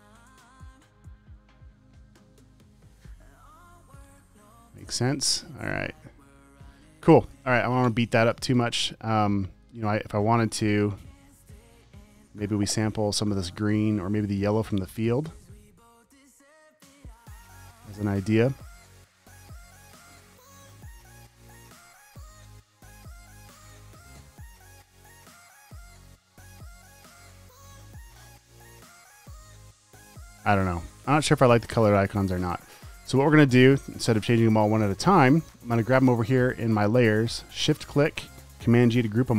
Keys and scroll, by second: 1.4 v, 1.9 Right, 2.9 Left, 5.2 Right, 6.0 Left, 6.8 space, 9.3 space, 12.5 i, 15.4 alt+BackSpace, 15.6 v, 17.8 alt+BackSpace, 22.0 alt+BackSpace, 24.2 alt+BackSpace, 27.5-29.1 typing, 31.0 space, 31.6 space, 31.9 space, 32.1 space, 39.0 super+g.